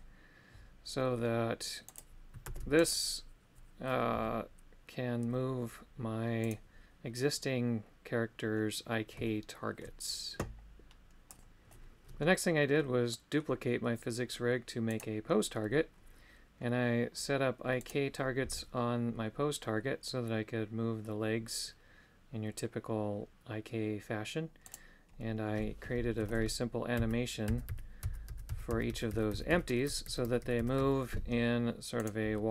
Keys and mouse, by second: 1.9-3.0 right drag, 4.2 g, 6.5 right click, 9.2 shift+middle click, 12.8 middle click, 15.0-19.7 right drag, 24.6 right click, 32.0-32.5 right drag.